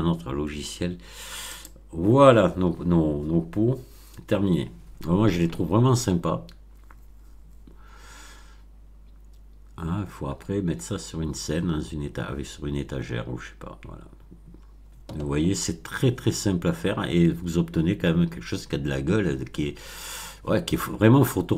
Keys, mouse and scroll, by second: 1.4 click.